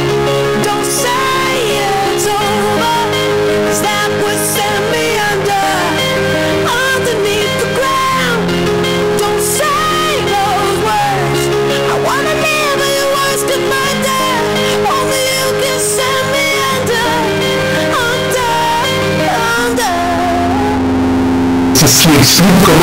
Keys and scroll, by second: 2.2 h, 2.5-4.2 Down, 4.7 Down, 4.7 Return.